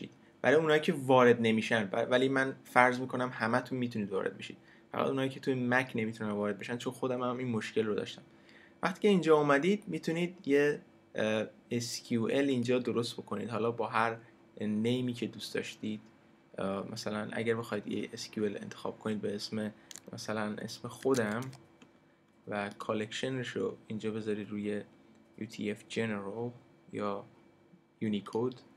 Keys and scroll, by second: 20.8-21.9 typing.